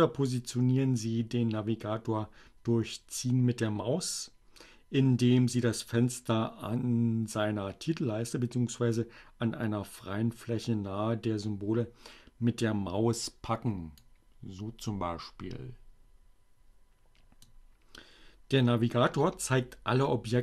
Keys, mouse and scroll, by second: 12.8-17.6 drag.